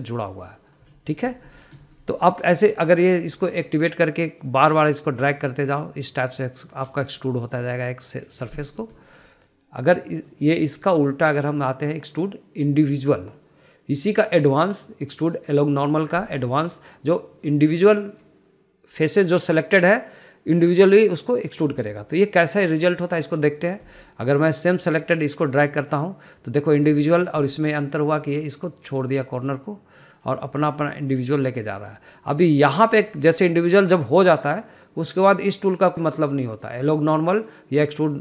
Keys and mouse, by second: 0.4 middle click, 1.7 middle click, 2.2 shift+middle click, 2.7 shift+middle click, 3.0 middle click, 5.7 click, 7.1 click, 8.3-9.4 middle drag, 9.9 shift+middle click, 10.2 shift+middle click, 11.5-24.4 drag, 24.9 middle click, 26.2 click, 26.4 click, 28.1 middle click, 28.6 middle click, 29.4 middle click, 30.5 middle click, 31.3 middle click, 31.7 middle click, 33.0 middle click, 33.6 middle click, 34.4 middle click, 35.3 middle click, 36.4-38.2 drag.